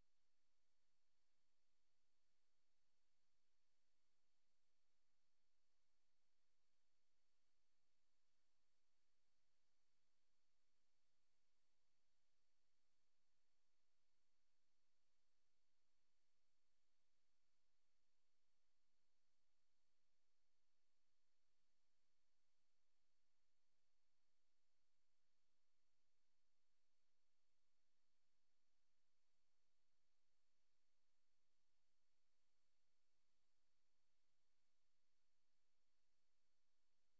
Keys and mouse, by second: 0.5 Right, 3.5 click, 3.9 click, 5.8 ctrl+z, 6.0 ctrl+z, 7.4 click, 9.0 ctrl+z, 10.7 Right, 13.5 Right, 15.9 click, 16.5 click, 17.6 click, 18.0 click, 18.4 click, 18.7 click, 19.0 click, 19.7 click, 20.0 click, 20.4 click, 21.5 click, 22.0 click, 22.7 click, 23.8 click, 24.1 click, 27.5 Right, 30.4 click, 31.1 click, 32.4 click, 33.0 click, 33.3 click, 35.0 click.